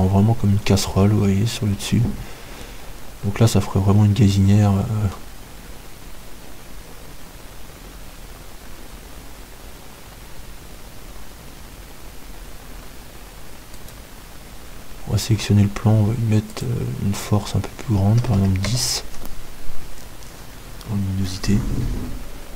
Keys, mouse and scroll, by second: 2.7-4.8 middle drag, 14.8-16.8 right drag, 17.2-18.8 drag.